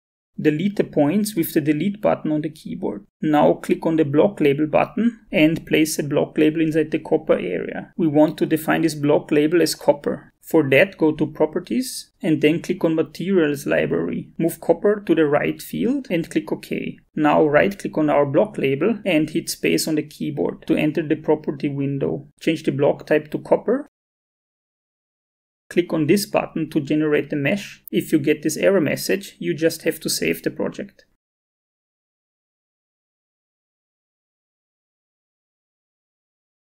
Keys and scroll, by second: 0.9 Delete, 19.8 space.